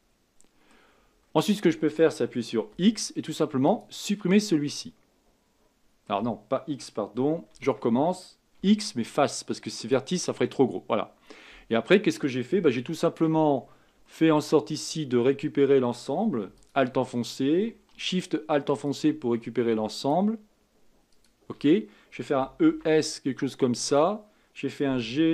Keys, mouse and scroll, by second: 1.0-3.6 scroll up 2, 3.8 x, 4.3-4.7 scroll down 2, 4.7-7.5 middle drag, 7.5 ctrl+z, 9.9 x, 10.5-13.4 middle drag, 13.4-14.0 scroll up 3, 14.0-16.7 shift+middle drag, 16.7 alt+click, 20.1 alt+shift+click, 21.2 alt+shift+click, 22.4 e, 24.9 g.